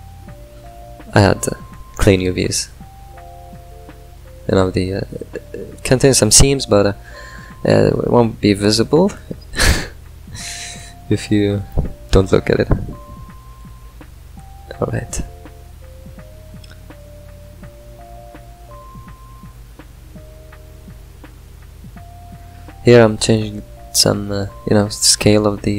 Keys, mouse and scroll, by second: 0.0-2.5 drag, 2.5-5.2 middle drag, 6.4-9.7 middle drag, 9.7-13.9 drag, 14.6-17.5 middle drag, 17.5 ctrl+shift+click, 19.0 middle click, 21.4-25.7 drag.